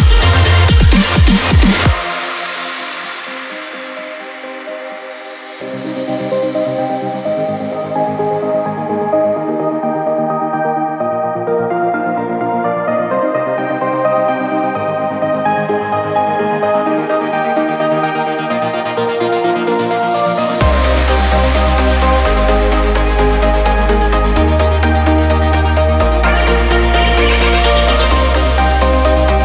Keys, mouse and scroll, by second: 0.6 click, 5.2 click, 7.3 l, 8.2 click, 11.9 l, 12.6 click, 15.3 i, 16.9 click, 19.9 click, 22.3 click, 25.6-29.4 drag.